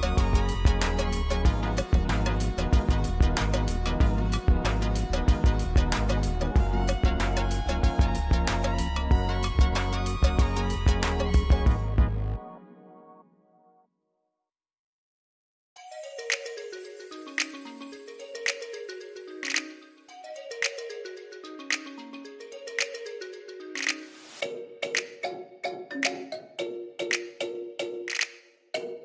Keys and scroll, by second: 3.0 shift+z, 6.0 ctrl+z, 7.7 ctrl+z, 9.4 ctrl+z, 10.1 ctrl+z, 12.0 shift+z, 13.2 g, 13.4 y, 23.4 m, 25.4-26.7 typing.